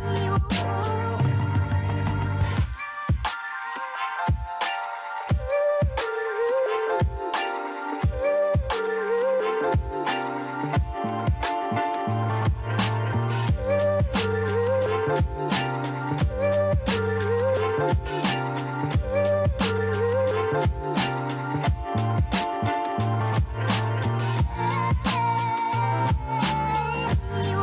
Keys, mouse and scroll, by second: 1.4 click, 2.3-3.8 right drag, 3.8 shift+z, 4.4-4.7 scroll up 2, 5.1-6.3 shift+middle drag, 6.3 Tab, 8.2 Tab, 10.0 ctrl+r, 11.2 Tab, 13.4 ctrl+r, 16.6 Tab, 17.4 shift+z, 18.1 click, 18.7-19.3 scroll down 8, 24.8-25.6 scroll down 4, 25.6-26.1 scroll up 2, 26.5-27.1 scroll up 5, 27.1 click.